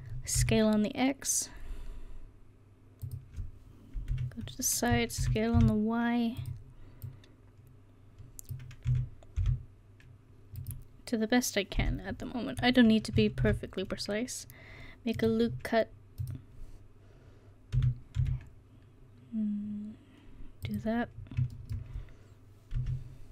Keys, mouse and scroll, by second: 4.1 KP_3, 5.2 s, 7.1 click, 8.9 s, 11.8 KP_1, 13.4 ctrl+r, 17.8 s, 21.2 middle click, 22.8 KP_3.